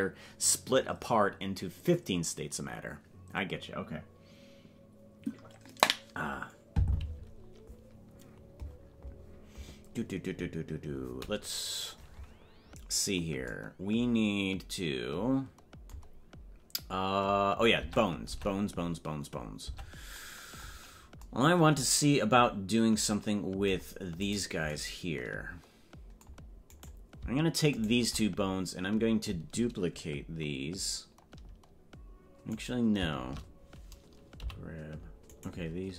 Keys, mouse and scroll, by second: 17.8 Tab, 20.9 scroll up 5, 24.3 right click, 26.9 right click, 27.8 shift+right click, 32.7 right click, 34.4 g.